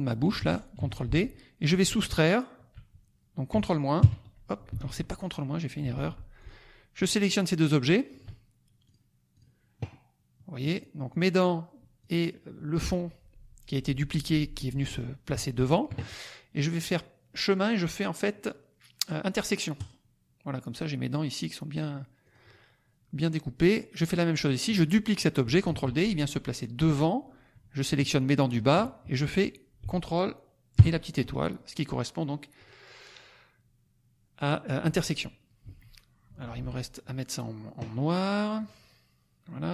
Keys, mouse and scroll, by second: 0.7 ctrl+d, 2.0 shift+click, 3.9 ctrl+KP_Subtract, 4.8 ctrl+z, 5.9 ctrl+z, 6.3 ctrl+click, 7.2 shift+click, 8.8 click, 9.3 click, 10.7 click, 11.0 click, 12.0 click, 15.5 shift+click, 16.8 click, 19.9 click, 22.2 click, 25.6 ctrl+d, 28.0 shift+click, 32.6 click, 35.6 Escape, 36.3 F2, 36.4 click, 38.5 click.